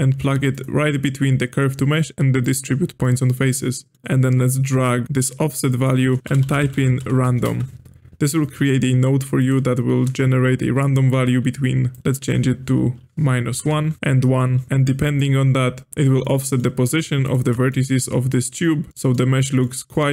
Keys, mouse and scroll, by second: 3.0-4.7 middle drag, 4.7-6.2 drag, 11.9-14.0 drag, 14.0 KP_1, 14.8-15.9 drag, 15.9 ctrl+z, 16.2-17.2 middle drag, 17.2 alt+shift+click, 17.6-19.2 middle drag, 19.2-19.6 scroll down 1, 19.6-20.1 middle drag.